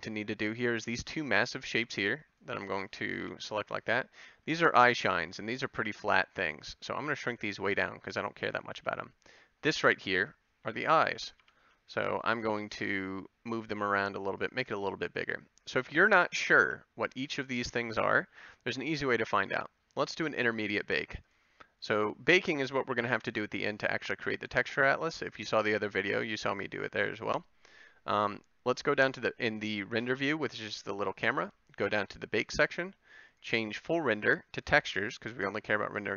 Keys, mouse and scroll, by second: 1.7 c, 3.2 ctrl+l, 5.9 s, 7.4 g, 8.8 a, 10.1 c, 11.4 ctrl+l, 12.5 g, 13.7 s, 14.5 g, 15.8 g, 16.6 a.